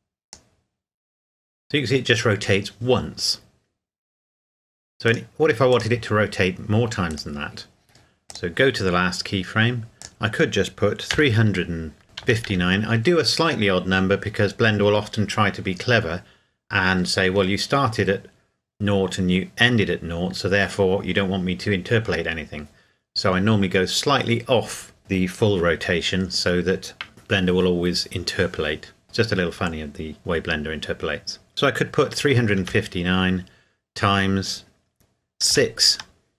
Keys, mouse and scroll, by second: 5.1 click, 7.1 right click, 8.3 click, 11.1 KP_3, 12.2 KP_5, 12.5 KP_9, 32.5 KP_9, 34.2 KP_Multiply, 35.5 KP_6.